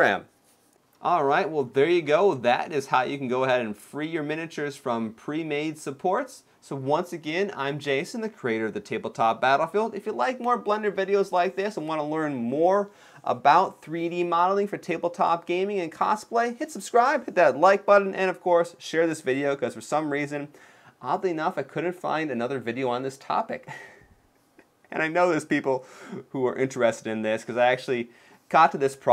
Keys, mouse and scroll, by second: 1.0 middle click, 1.6-2.0 scroll down 2, 2.0 shift+middle click, 2.8 scroll down 1.